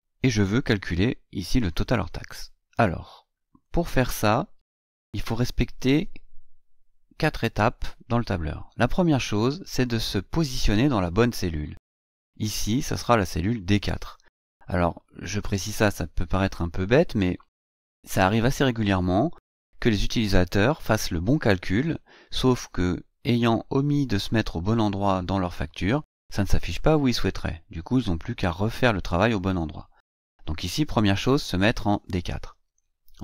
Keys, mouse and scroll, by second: 3.4 click.